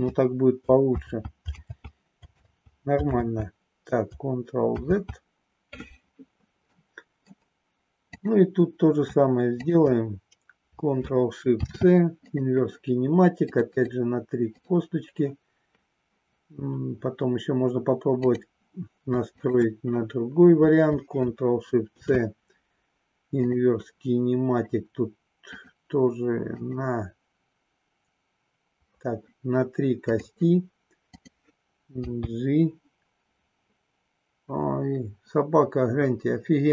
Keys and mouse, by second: 0.9 ctrl+z, 6.7 middle click, 8.0 click, 9.7 shift+click, 12.3 ctrl+shift+c, 13.9 click, 14.4 click, 18.3 click, 19.2 shift+click, 21.8 ctrl+shift+c, 25.4 click, 26.5 click, 29.9 click, 32.0 g.